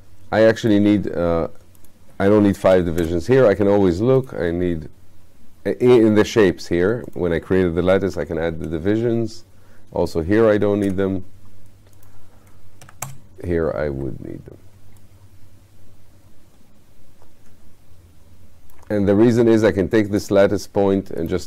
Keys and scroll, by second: 2.8 2, 8.2 5, 10.5 2, 12.9 5.